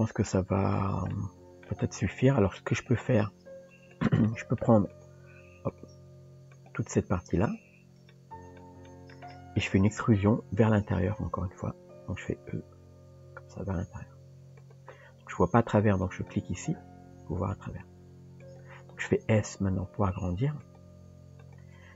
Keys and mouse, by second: 1.1 middle click, 2.8 click, 3.9 click, 4.2 middle click, 4.9 shift+click, 6.6 shift+click, 7.4 shift+click, 8.1 middle click, 8.9 middle click, 9.3 middle click, 11.2 KP_3, 12.7 e, 16.1 click, 19.2 s, 20.9 g, 21.8 Tab.